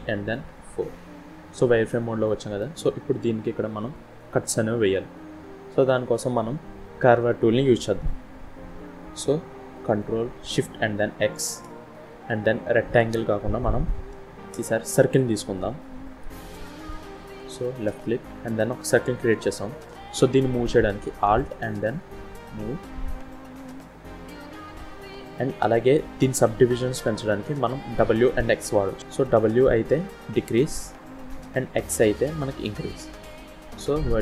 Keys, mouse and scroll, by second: 1.1-1.7 scroll up 3, 1.8 shift+middle click, 2.5-3.5 shift+scroll down 2, 4.6 scroll down 2, 8.2-9.2 scroll up 2, 9.2 scroll down 2, 11.2 ctrl+shift+x, 16.8 shift+middle click.